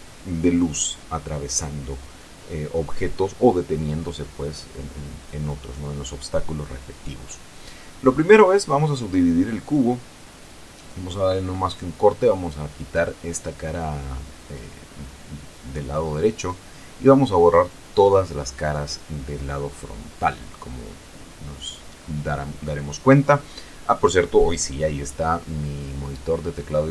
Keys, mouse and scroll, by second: 1.4 click, 2.2 click, 3.4 click, 7.1 Tab, 8.1 Tab, 8.4 middle click, 10.6 click, 14.2 x, 16.6 click, 17.4-18.9 middle drag, 19.3 c, 20.1-22.0 drag, 22.1 Escape, 23.1 x, 24.5 click, 25.1 scroll down 2, 25.4-26.9 middle drag.